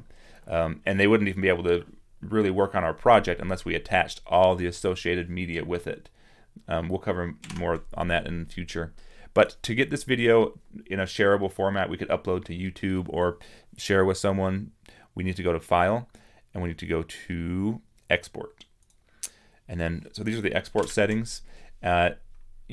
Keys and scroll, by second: 7.5 super+-, 18.2 super+-.